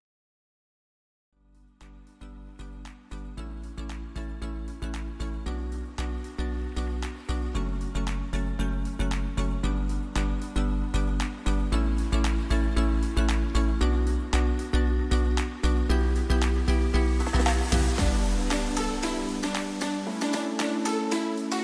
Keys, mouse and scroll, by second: 1.8 click, 2.0 ctrl+j, 3.5 ctrl+click, 6.8 ctrl+click, 7.0 ctrl+d, 8.3 click, 9.6 m, 10.1-13.9 drag, 15.2 click, 15.4 ctrl+d, 19.3 ctrl+d, 19.4 ctrl+click.